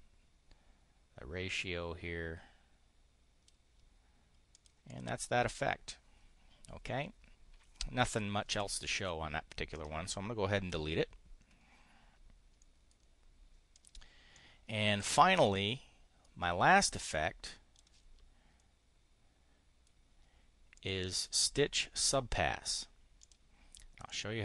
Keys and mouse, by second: 4.4 click, 4.7 click, 9.7 click, 10.7 Delete, 12.5 click, 13.6 click, 14.1 click, 16.7 click, 20.5 click, 23.1 click, 23.9 click.